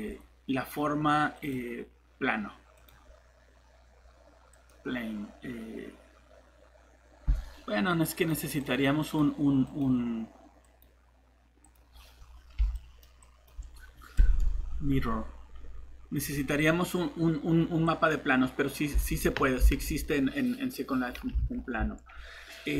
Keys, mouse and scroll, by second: 0.0 alt+Escape, 12.2 scroll up 1, 12.8 click, 19.0 alt+Tab, 19.6 alt+Tab, 21.4 alt+Tab.